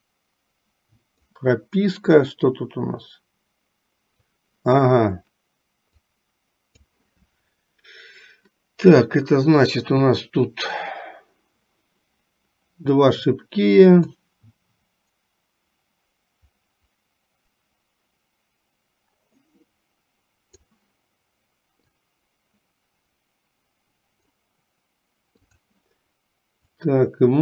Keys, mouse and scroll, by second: 2.7-4.3 drag, 6.2 click, 14.3-20.7 drag, 22.0-24.4 drag, 25.6 click, 26.8-27.4 drag.